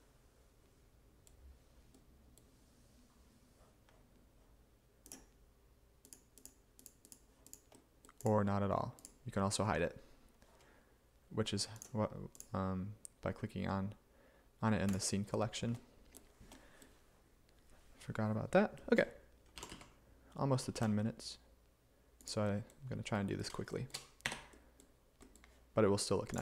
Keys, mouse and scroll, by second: 19.6 g, 19.8 x, 20.9 y, 24.3 Tab, 24.8 g.